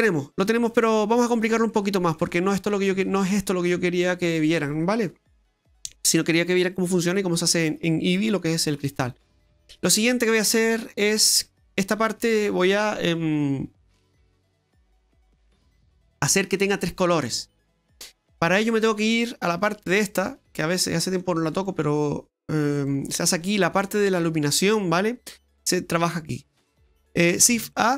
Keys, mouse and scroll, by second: 1.1-2.1 scroll down 4, 1.7 middle click, 3.7 middle click, 17.2-17.9 scroll down 3, 17.9-19.3 scroll down 9, 18.3 middle click, 19.5 click, 20.5 click, 21.2 click, 22.4 click, 24.9 middle click, 26.1 middle click, 27.5 shift+a.